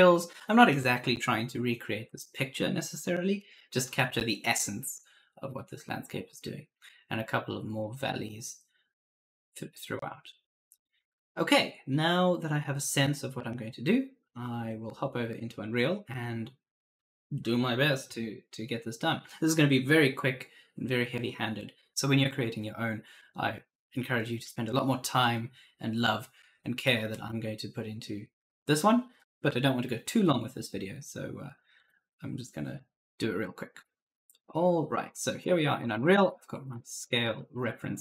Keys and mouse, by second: 7.0 click, 31.6 click, 33.7 click, 35.3 right click, 35.4-38.0 typing, 36.8 right click, 37.8 click.